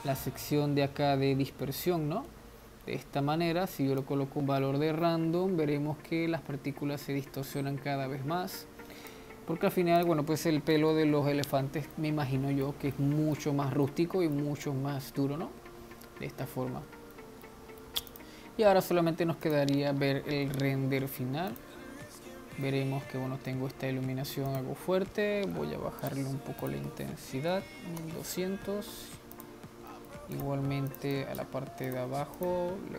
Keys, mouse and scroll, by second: 1.1 scroll down 2, 4.3-7.4 drag, 10.2-12.3 drag, 12.3-13.9 middle drag, 13.9 scroll down 2, 14.1-18.5 middle drag, 18.5 click, 19.5 z, 21.8 click, 22.9-24.1 middle drag, 24.1 scroll down 3, 24.7 click, 26.3 click, 26.9-28.0 drag, 28.0 0, 29.6-30.0 drag, 30.2 middle click, 30.6 click, 31.3 click, 32.6 click.